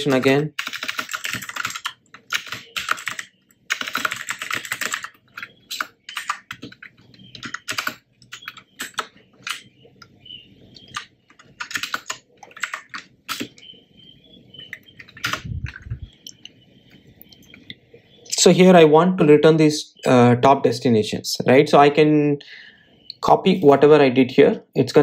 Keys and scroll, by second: 7.0 Return, 13.1 alt+Return, 18.9 Tab.